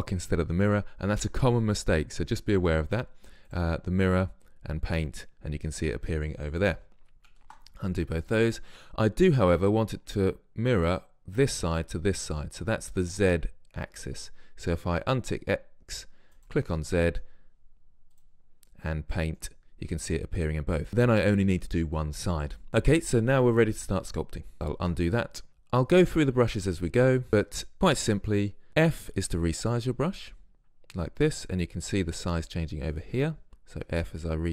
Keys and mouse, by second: 3.6-7.1 drag, 7.1 ctrl+z, 7.4 ctrl+z, 9.2 drag, 9.3 click, 15.2-17.1 drag, 17.1 middle click, 17.1 click, 17.3-18.2 middle drag, 18.2-20.4 drag, 20.4-20.7 middle drag, 20.7 drag, 22.7-24.8 drag, 24.8 ctrl+z, 29.0 f, 33.8 f.